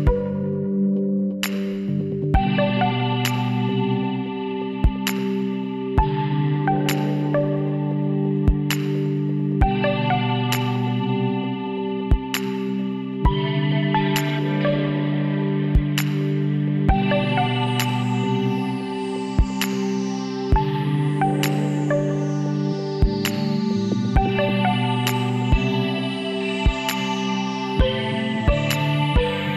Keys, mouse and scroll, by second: 1.7 KP_1, 3.1 KP_3, 4.4 z, 6.4 Tab, 7.1-8.6 middle drag, 9.0 middle click, 9.5-12.7 middle drag, 12.7-14.6 drag, 13.8-15.3 right drag, 14.9 c, 23.2-24.2 right drag, 24.5 right click, 24.8 click, 25.2-27.7 middle drag, 27.7 c.